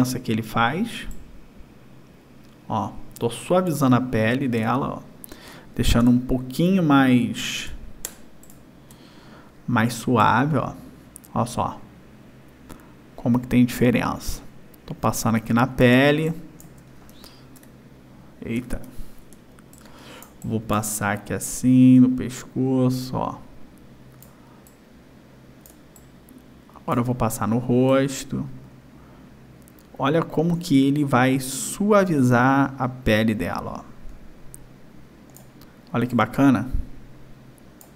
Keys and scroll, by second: 4.6 ctrl+-, 6.0 ctrl+=, 7.6 space, 16.1 space, 17.6 ctrl+=, 19.3 space, 25.7 space.